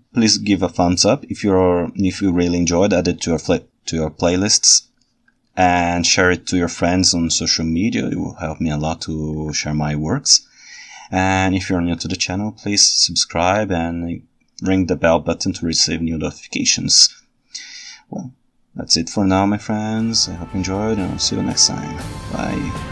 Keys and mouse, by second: 9.8-11.1 ctrl+alt+right drag.